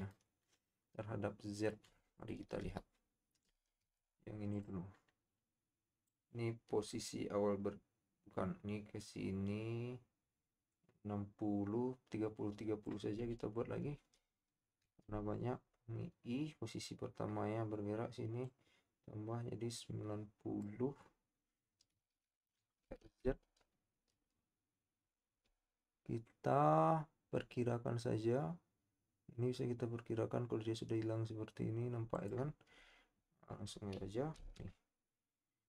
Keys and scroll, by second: 2.8 KP_7, 3.8 z, 15.0 i, 23.0 z, 34.3 i.